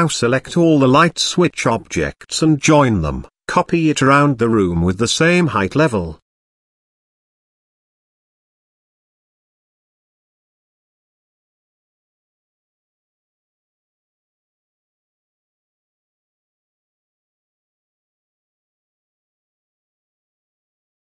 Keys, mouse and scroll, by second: 0.1-1.3 middle drag, 2.0 middle click, 2.5 shift+middle drag, 2.8 middle click, 3.5 shift+d, 5.2 r, 7.7 middle click, 8.1 KP_Decimal, 9.0-9.3 middle drag, 9.7 shift+middle drag, 10.4 g, 15.4 shift+middle click, 16.0 KP_Decimal, 16.5 scroll up 1, 16.8 middle click, 17.3 g, 20.7 middle click.